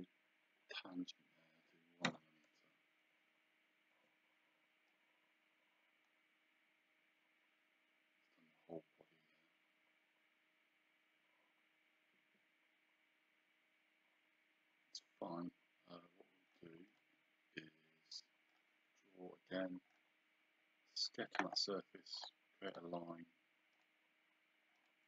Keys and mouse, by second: 2.1 KP_1, 3.9 Return, 3.9 KP_Enter, 4.9 click, 16.9 click, 18.5 click, 19.9 click, 22.2 click.